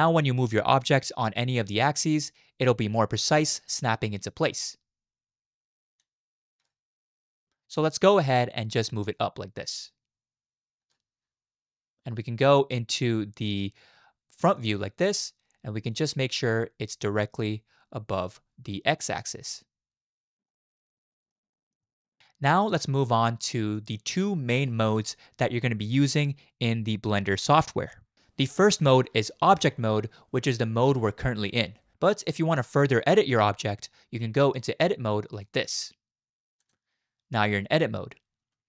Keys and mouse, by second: 3.0 click, 3.2-6.7 drag, 9.1 click, 17.1-18.3 drag, 20.5-21.3 middle drag, 21.5 middle click, 21.8 shift+middle click, 22.0 middle click, 22.5-23.0 middle drag, 23.0 click, 35.3-36.7 drag.